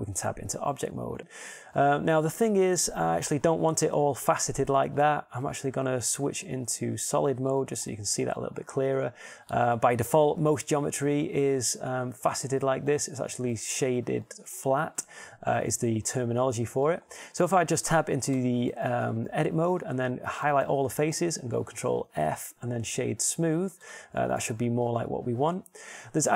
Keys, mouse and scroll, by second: 1.2 Tab, 7.4-9.9 drag, 11.7-13.2 middle drag, 19.5 Tab, 21.5 a, 21.8 a, 23.2 ctrl+f, 25.0 Tab.